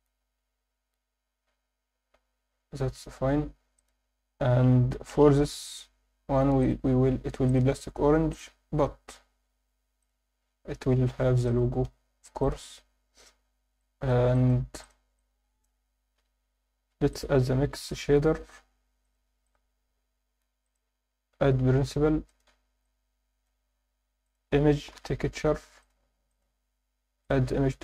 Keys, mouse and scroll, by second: 1.5 scroll up 1, 2.5 scroll down 2, 3.7 click, 4.1 Tab, 4.9 KP_7, 6.6 click, 7.5-8.5 drag, 9.0 Tab, 10.0 click, 11.5-13.1 drag, 13.1-13.7 scroll down 4, 13.8 alt+shift+middle click, 14.3 alt+shift+middle click, 14.8 click, 15.2 click, 16.2 n, 16.7 shift+a, 20.6 click, 22.2 click, 22.8-23.5 drag, 27.2-27.8 drag.